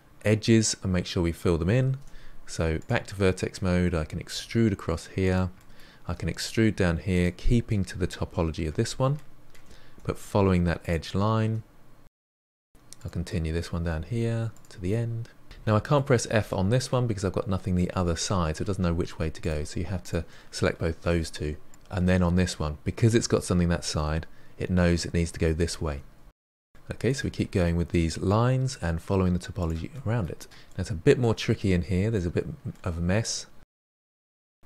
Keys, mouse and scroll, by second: 1.9 1, 2.8 click, 3.2-4.3 middle drag, 4.3 e, 5.5 middle click, 6.1 e, 9.1 shift+middle click, 9.7 e, 10.0 e, 10.6 shift+middle click, 10.7 e, 11.0 e, 11.2 shift+middle click, 12.1-15.1 typing, 12.6 click, 13.0 middle click, 13.4 click, 14.3 click, 14.6 middle click, 14.8 scroll down 2, 15.0 click, 15.9-19.4 shift+middle drag, 19.4 click, 20.0 shift+click, 21.0 f, 21.6 click, 21.7 ctrl+z, 25.2-26.4 typing, 26.2 middle drag, 26.8 middle click, 26.9 click, 27.1-28.1 middle drag, 28.1 e, 29.1 middle click, 29.6 e, 30.8-34.6 middle drag.